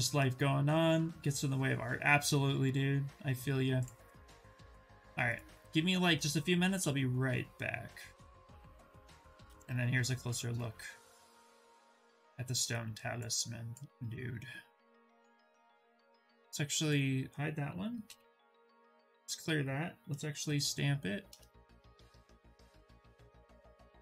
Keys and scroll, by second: 17.7 ctrl+n, 20.1 shift+s.